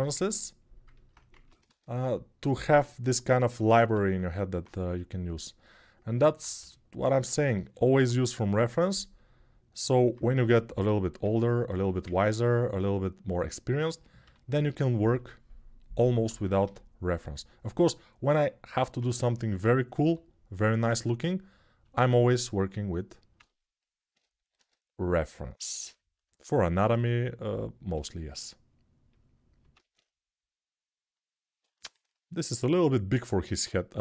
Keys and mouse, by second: 1.1 ctrl+Tab, 1.4 shift+a, 3.4 Tab, 4.0-7.0 alt+right drag, 6.3 g, 7.0-8.0 alt+shift+middle drag, 8.0-10.9 drag, 10.1 g, 10.9-25.5 alt+middle drag, 13.0-14.8 drag, 13.0 right click, 14.0 g, 16.4 g, 19.8 g, 24.3 shift+d, 25.5-27.3 drag, 26.6 s, 27.3-34.0 middle drag, 27.7 g, 29.5 alt+s.